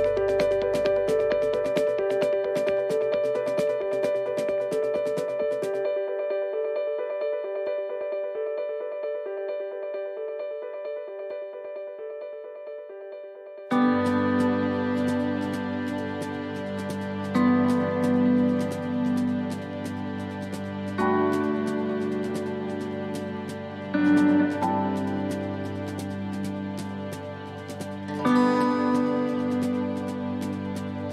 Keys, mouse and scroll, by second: 0.2 scroll up 3, 0.7 right click, 2.0 alt+shift+right click, 3.2 e, 7.6 e, 9.5 click, 12.1 e, 14.1 click, 16.2 e, 17.9 click, 19.9 e, 21.7 click, 23.5 e, 28.1 click, 31.0 e.